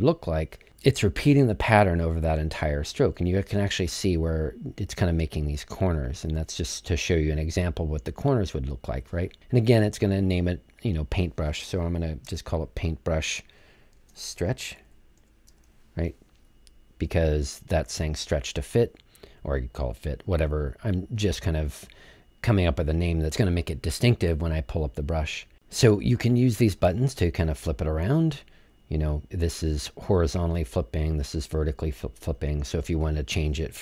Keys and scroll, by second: 12.6-16.5 typing.